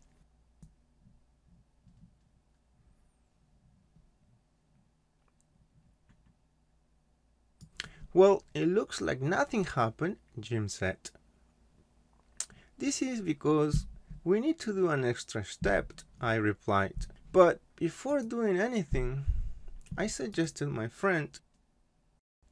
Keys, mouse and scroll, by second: 0.6 click, 7.9 click, 18.1 right click, 20.3 click.